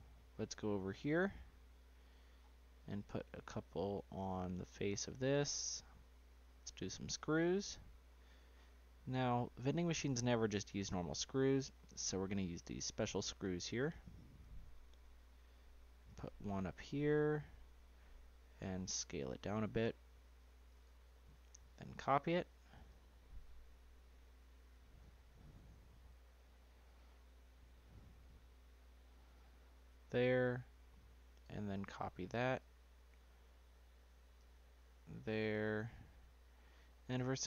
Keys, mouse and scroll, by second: 0.5 middle click, 0.8 scroll up 1, 1.7 click, 2.4-2.9 scroll up 4, 2.9 shift+middle click, 3.4-4.3 shift+scroll up 1, 4.3 d, 10.8-11.6 scroll up 2, 11.6-13.7 scroll down 5, 13.7 click, 14.9 click, 16.4 click, 17.6-18.1 scroll up 2, 18.1-18.7 shift+middle drag, 18.7-19.7 scroll up 2, 19.7 scroll up 2, 19.8 s, 21.8 ctrl+c, 23.0 ctrl+v, 24.7 click, 26.3 click, 28.6 click, 30.9 shift+click, 32.0 ctrl+c, 34.5 ctrl+v, 34.7 click, 37.2 click.